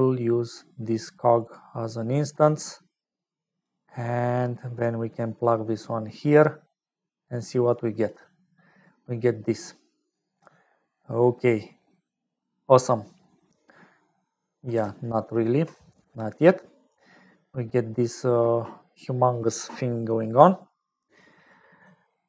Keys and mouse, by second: 0.9-2.1 drag, 3.3 click, 3.9 middle click, 5.0 middle click, 6.3-8.0 drag, 10.6 middle click, 12.3 middle click, 15.2 ctrl+alt+click, 21.5 middle click.